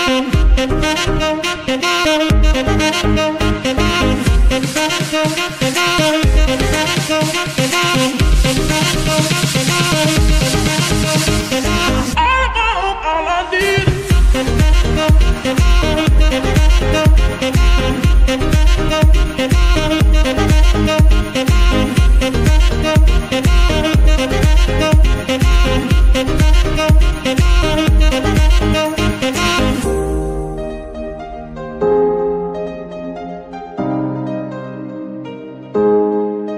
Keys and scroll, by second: 2.3 ctrl+Return, 12.2 Escape, 13.4 KP_0, 13.5 Return, 21.6 g, 22.2 Escape, 23.6 g, 24.1 Escape, 31.6 KP_Divide, 32.1 a.